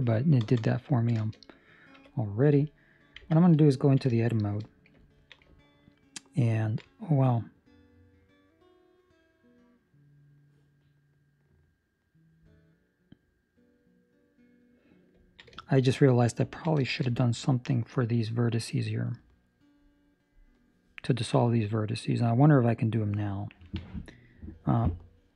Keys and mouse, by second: 0.4 ctrl+space, 1.9 KP_3, 3.2 Tab, 3.6 ctrl+middle click, 4.1 shift+middle click, 5.0 ctrl+middle click, 6.0 ctrl+middle click, 6.3 ctrl+middle click, 6.8 middle click, 15.3 ctrl+middle click, 15.5 shift+middle click, 15.8 middle click, 16.6 ctrl+middle click, 16.8 shift+middle click, 17.1 middle click, 18.0 middle click, 18.4 shift+middle click, 21.7 middle click.